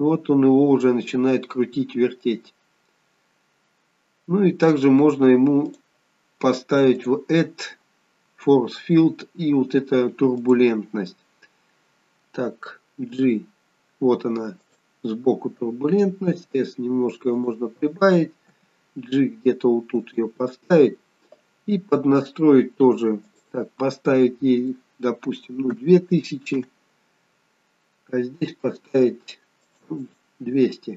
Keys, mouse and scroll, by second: 1.4-2.5 scroll up 3, 3.7 scroll down 2, 5.7 click, 6.9 click, 13.0 g, 16.3 s, 18.4 g, 23.2 click, 29.6 click, 30.0 click.